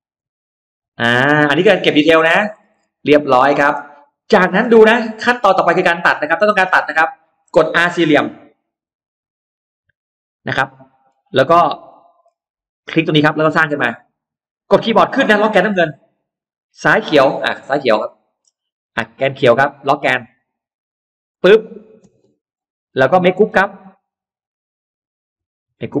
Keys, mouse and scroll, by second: 0.0 click, 1.2 click, 1.8-2.8 scroll down 4, 2.0 space, 2.0 middle click, 2.4 middle click, 2.6 middle click, 2.8 middle click, 3.9 middle click, 4.6 click, 5.2-6.2 scroll up 4, 6.0 middle click, 6.3-6.6 scroll down 2, 6.9-7.3 scroll up 2, 7.0 middle click, 7.6 scroll down 1, 8.6 r, 10.4 scroll up 1, 10.4 middle click, 11.8 middle click, 13.0 click, 13.2-13.5 scroll down 2, 15.7-16.4 scroll up 2, 16.6 click, 17.2-17.8 scroll up 1, 17.9 middle click, 21.2 click, 21.9 space, 22.2 middle click, 22.6-22.9 scroll down 1, 23.2-23.6 scroll up 1, 23.6 click, 24.1 click, 24.3 click, 25.2 g, 25.6-26.0 scroll down 1.